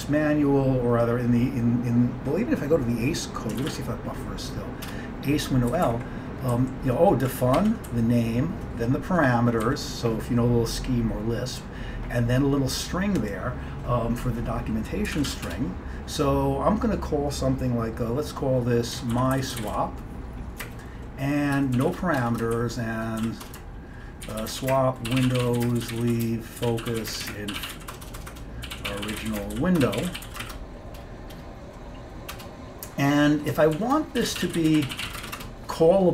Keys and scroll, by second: 3.7 ctrl+x, 3.8 b, 5.0 Return, 5.8 Up, 5.9 Up, 6.6 Down, 7.1 Down, 7.1 Down, 7.6 Down, 7.9 Right, 8.4-9.7 Right, 9.7 Down, 15.2 ctrl+x, 15.3 b, 15.5 Return, 18.8-20.7 typing, 21.9-31.0 typing, 32.2-35.8 typing.